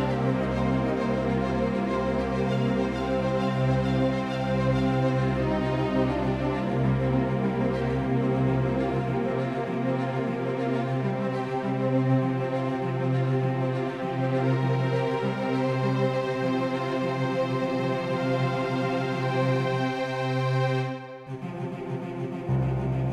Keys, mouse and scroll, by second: 7.8-9.6 middle drag, 10.2-15.5 right drag, 10.6 Tab, 19.8-23.1 drag.